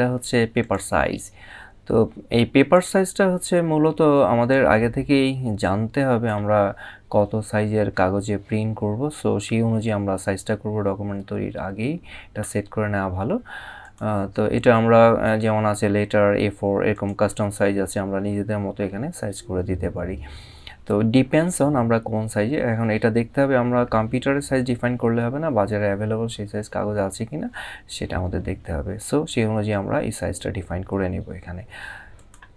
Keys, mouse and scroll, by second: 0.3 click, 2.4 click, 4.2 click, 13.5 click, 16.6 click, 31.8 click.